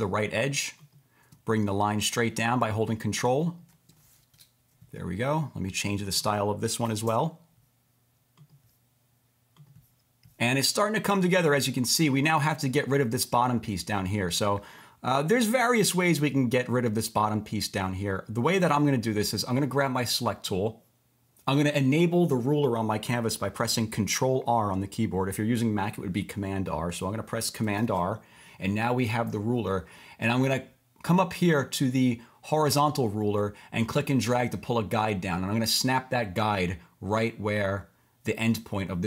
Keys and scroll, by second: 4.3 Return, 6.9 5, 7.1 Return, 27.8 super+r.